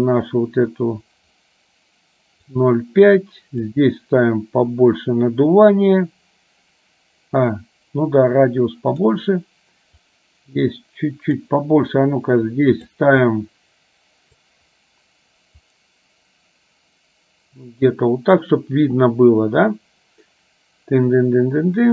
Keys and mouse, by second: 3.8-9.3 drag, 10.2-12.9 drag, 13.3-14.6 drag, 15.9-18.4 drag.